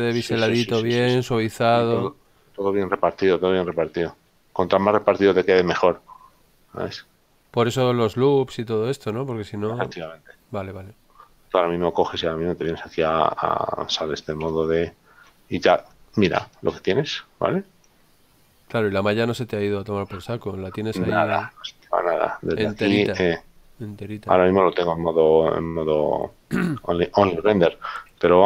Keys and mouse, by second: 15.3 Tab, 15.6 middle click, 21.3 click.